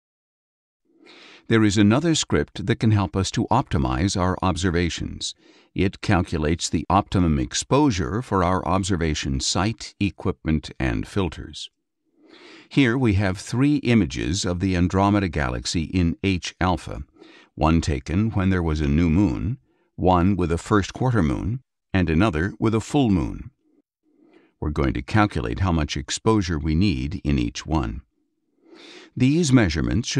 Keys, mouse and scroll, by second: 17.4 click, 19.1 click, 22.1 click, 24.0 click, 26.3 click, 28.5 click.